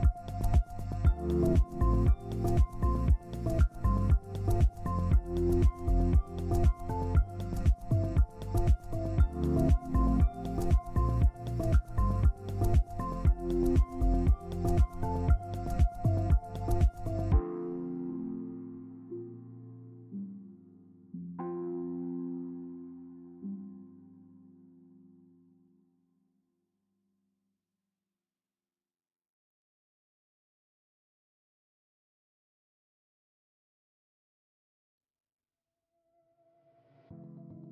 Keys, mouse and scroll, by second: 2.0 ctrl+space, 2.6 scroll down 1, 3.0 z, 9.6 shift+click, 10.0 c, 15.3 shift+click, 19.8 double click, 20.3 scroll down 1, 20.6 z, 21.8 ctrl+space, 22.6 double click, 22.9 Down, 24.4 Down, 24.6 Down, 25.4 shift+click, 26.3 Down, 26.7 Down, 26.9 Down, 27.0 Down, 27.2 Down, 27.5 Down, 27.7 Down, 29.0 Down, 29.6 Down, 29.8 Down, 30.0 Down, 30.1 Down, 30.3 Down, 30.6 Up, 31.4 scroll down 1, 31.9 z, 33.2 ctrl+space, 34.5 ctrl+space, 35.4 double click.